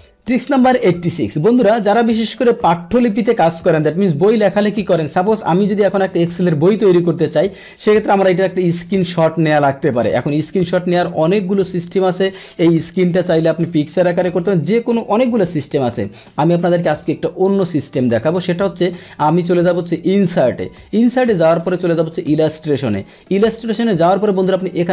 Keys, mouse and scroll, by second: 0.8 click, 7.6 click, 16.9 click, 22.4 click.